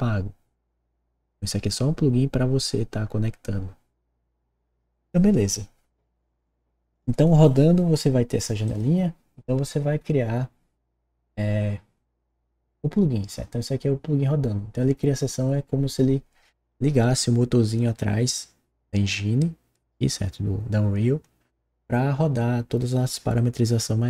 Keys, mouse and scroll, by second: 6.8 click, 8.6 click.